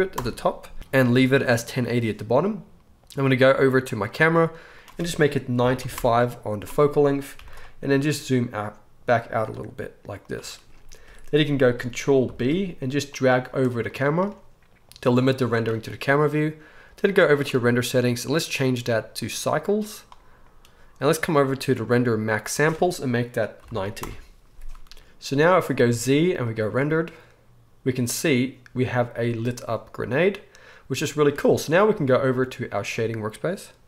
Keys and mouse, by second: 3.9 middle click, 4.8-10.3 drag, 7.3 g, 10.3-17.0 middle drag, 12.2 ctrl+b, 17.0 click, 17.2-18.4 middle drag, 18.4-33.8 drag, 25.0 ctrl+s, 25.8 z, 31.1 z.